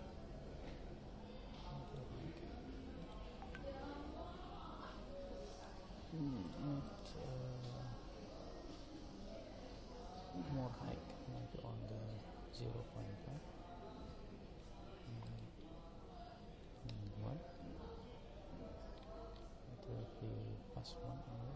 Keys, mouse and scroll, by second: 3.1 click, 5.5-8.7 drag, 15.3 click, 18.9-21.5 middle drag.